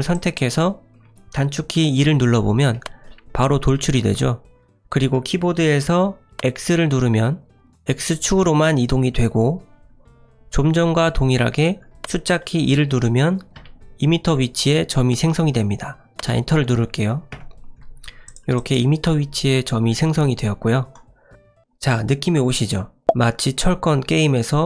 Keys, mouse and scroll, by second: 0.1 click, 2.7 e, 12.0 2, 18.2 click, 18.5 click.